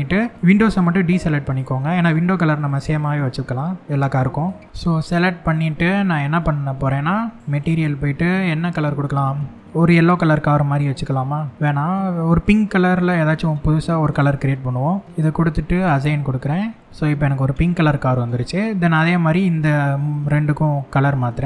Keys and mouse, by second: 0.3 shift+click, 1.0 shift+click, 1.7 shift+click, 2.3 shift+click, 2.8 middle click, 4.6-6.1 middle drag, 13.7 click, 14.8 click, 15.3 click, 16.4 click, 16.8-18.1 middle drag, 19.2 shift+middle click, 21.3 Tab.